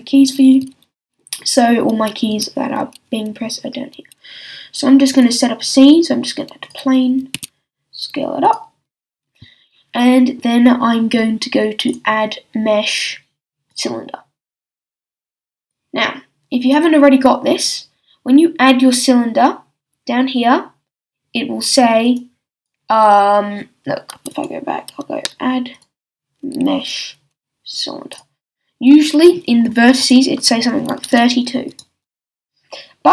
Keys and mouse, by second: 5.1-7.3 drag, 7.3 s, 8.5-10.5 drag, 11.9-13.8 drag, 15.7-18.0 drag, 22.0-24.2 drag, 24.2 x, 24.4-25.7 drag, 27.4-30.0 drag.